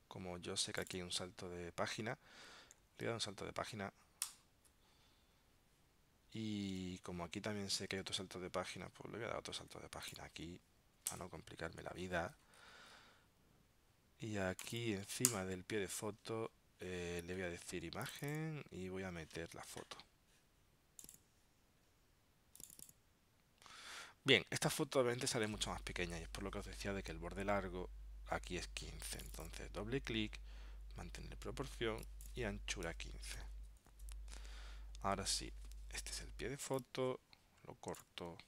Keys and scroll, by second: 4.4 super+Return, 6.8 super+Tab, 8.0 super+Tab, 11.2 super+Return.